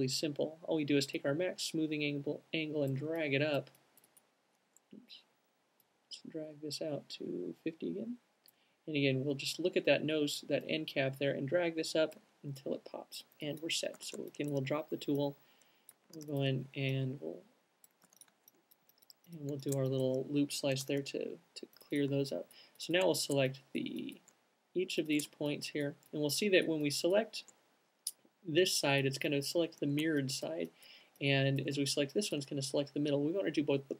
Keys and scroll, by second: 14.2 alt+q, 16.0 c, 18.1-18.9 typing, 21.2 space.